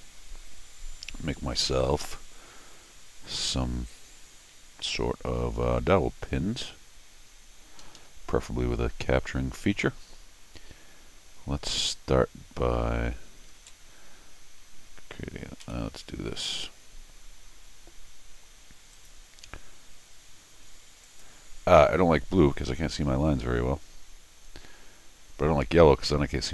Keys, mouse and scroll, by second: 7.8 Escape, 8.0 Escape, 13.6 alt+l, 15.6 n, 16.5 middle click, 16.6 scroll down 1, 18.9 click, 21.0 click.